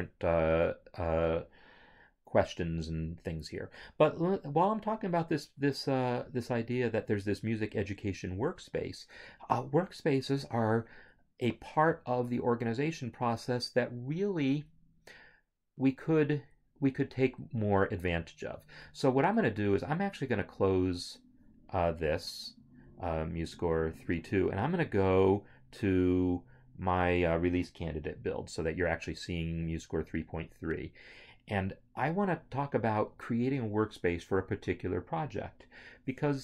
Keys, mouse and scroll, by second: 20.3 click, 23.0 click.